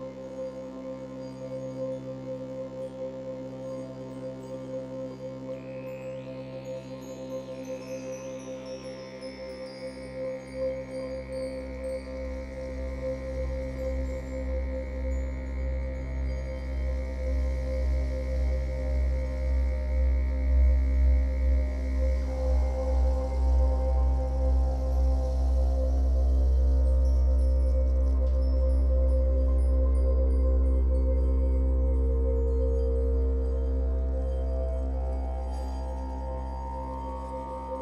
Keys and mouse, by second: 0.8 Tab, 0.8 typing, 1.5-2.3 alt+drag, 2.6 ctrl+alt+click, 3.0-3.3 alt+drag, 3.9 click, 5.0 click, 5.6-11.1 alt+drag, 5.6 typing, 9.4 Tab, 11.2-14.7 drag, 15.3 a, 18.6 s, 18.9 x, 20.0 Escape, 22.0 click, 22.6 click, 24.4 g, 24.8 x, 26.0 click, 26.6 Tab, 28.0 click, 29.3 drag, 30.5 g, 30.8 x, 32.8 shift+click, 33.3-37.8 alt+drag.